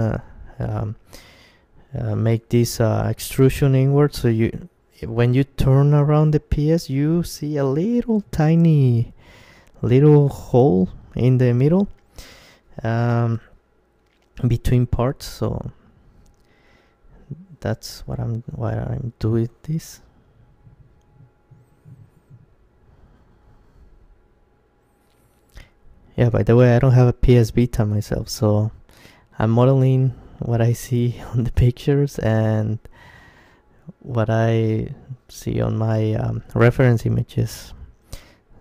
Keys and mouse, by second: 0.3-1.9 right drag, 0.6 g, 4.6-6.6 drag, 4.9-6.4 right drag, 5.2 g, 8.1-12.8 drag, 8.6-12.8 right drag, 8.8 g, 10.7 g, 11.8 g, 13.0 click, 13.0 g, 14.0 g, 15.1 g, 15.5-21.2 drag, 16.5-19.4 right drag, 16.8 g, 17.9 g, 21.2-24.3 middle drag, 21.7 Tab, 24.6 Tab, 25.5-27.2 middle drag, 26.9 KP_Decimal, 28.7-31.5 middle drag, 30.1 click, 30.1-31.9 right drag, 31.5 g, 36.0-37.9 drag, 36.5-38.6 right drag.